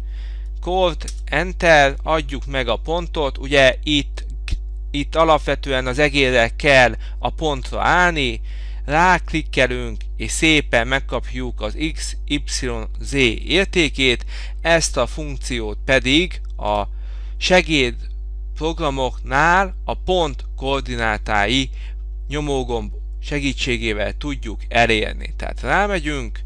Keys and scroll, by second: 1.2 Return.